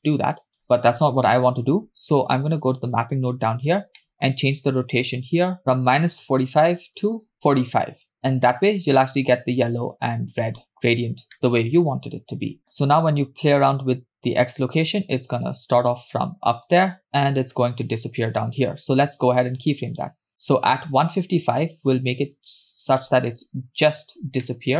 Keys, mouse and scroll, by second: 0.9 scroll down 2, 1.3-2.3 middle drag, 2.9 click, 4.0 middle click, 4.5-5.6 scroll up 1, 5.6 scroll up 2, 5.7-7.5 drag, 11.0 scroll down 2, 11.4 middle click, 12.6 scroll down 1, 12.7 middle click, 13.8-23.0 shift+drag, 23.7-24.2 scroll up 2, 24.5-24.7 shift+middle drag.